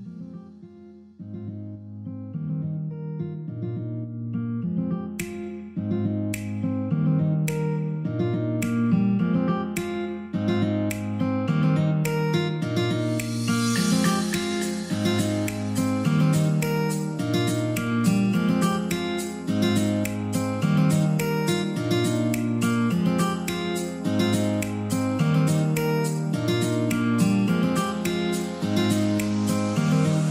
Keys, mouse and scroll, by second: 14.7 ctrl+z, 15.8 click, 19.3 Delete, 21.5 typing, 22.3 F10, 23.5 click, 25.7 scroll down 1, 26.4-27.3 scroll up 1, 27.3 click, 29.3 Delete, 30.1 click.